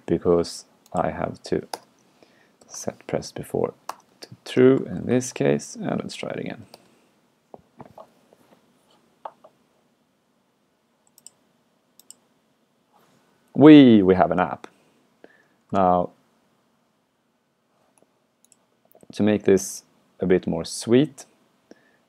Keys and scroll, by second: 15.8 super+q.